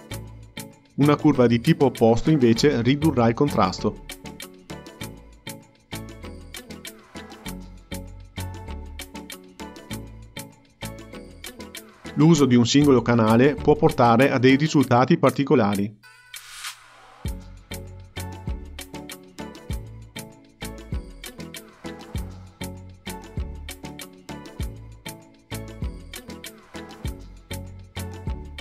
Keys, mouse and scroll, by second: 0.4-5.5 drag, 10.7-13.1 drag, 13.8-17.7 drag, 18.4-19.4 drag, 20.0-22.5 drag, 23.2-24.2 drag, 24.8-28.6 drag.